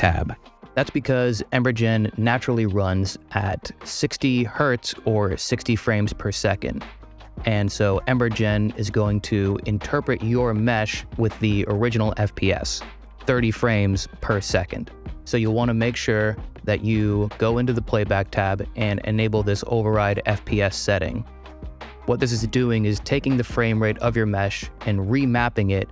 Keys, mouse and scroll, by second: 2.4 click, 14.9 click.